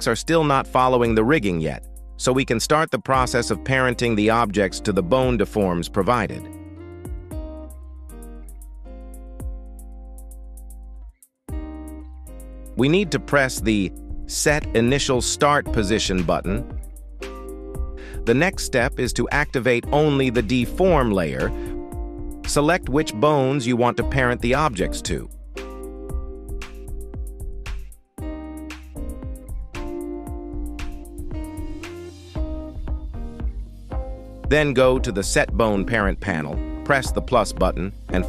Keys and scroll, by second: 8.9 Escape, 29.9 z.